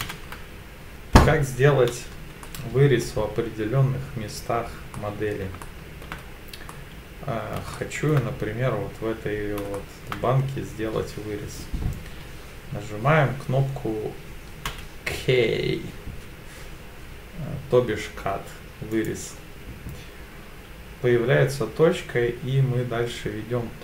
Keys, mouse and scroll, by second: 2.4 middle click, 4.9 middle click, 5.6 shift+middle click, 6.2-6.7 scroll down 2, 6.7 middle click, 7.7 shift+middle click, 9.7 shift+middle click, 14.7 k.